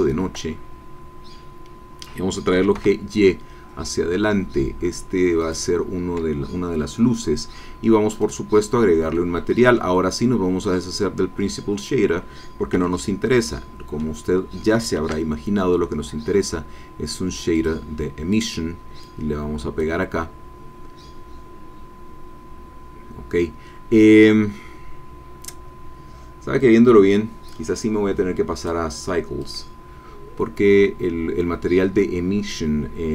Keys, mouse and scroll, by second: 0.5-1.4 scroll down 6, 2.5 g, 2.7 y, 5.4 click, 8.2 click, 9.1 middle click, 11.7 click, 13.1 middle click, 13.1 x, 13.1-14.4 drag, 14.9 shift+a, 17.5 click, 18.3 click, 19.0 click, 28.5 click.